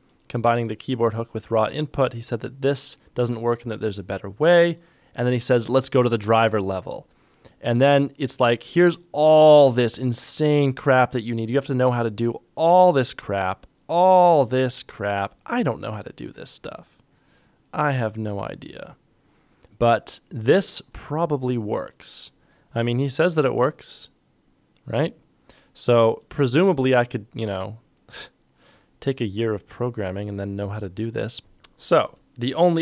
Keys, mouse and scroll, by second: 31.4 ctrl+Tab.